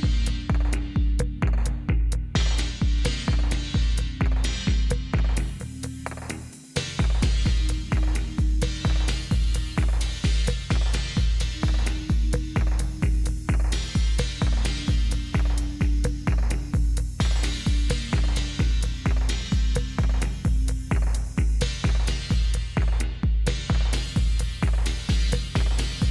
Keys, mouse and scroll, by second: 2.4 click, 3.5 right click, 4.7 click, 10.2-14.9 typing, 16.5 Return, 17.6-21.0 typing, 24.3 Return.